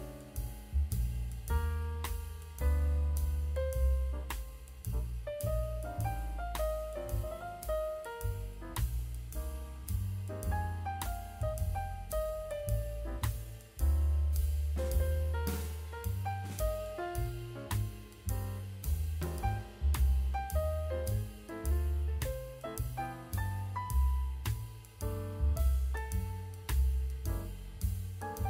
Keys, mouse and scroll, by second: 0.3-0.6 middle drag, 1.1 click, 1.4 h, 2.2-2.7 drag, 3.2 middle drag, 4.2 click, 4.6 middle click, 5.1-5.5 drag, 5.9-6.2 middle drag, 6.8 click, 7.1-7.7 scroll up 4, 8.4 a, 8.8-9.2 scroll down 2.